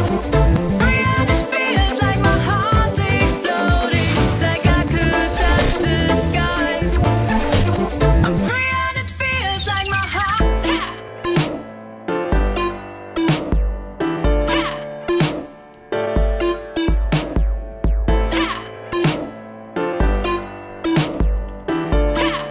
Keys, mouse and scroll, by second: 0.2 click, 0.6 click, 1.7 alt+click, 2.6 click, 10.4 click, 12.1 click, 12.7-13.1 drag, 13.9 click, 14.4 click, 15.7 click, 17.0 scroll up 1, 17.2 click, 18.2 click, 19.1 click, 20.0 click, 21.1-21.9 typing.